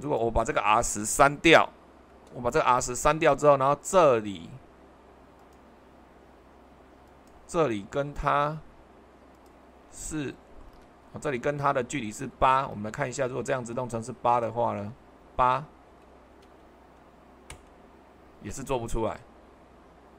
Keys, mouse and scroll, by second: 2.1 Delete, 10.8 super+1, 12.6 super+2, 16.4 8, 17.5 Return.